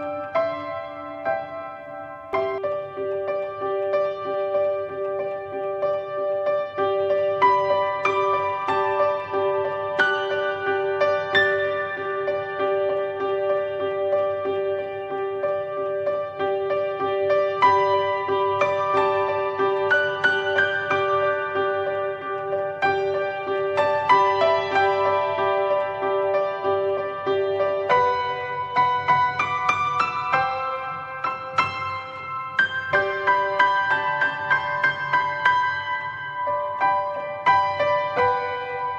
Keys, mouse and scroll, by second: 2.3 n, 5.6-6.2 drag, 7.9-9.9 drag, 11.5 click, 15.2 click, 19.5-22.7 drag, 22.9 scroll down 1, 23.7-28.0 middle drag, 28.0 click, 28.3 middle click, 28.8 drag, 30.5-31.0 drag, 31.0-31.4 scroll up 4, 32.8 click, 34.9 click, 35.7 scroll down 1, 36.6 click.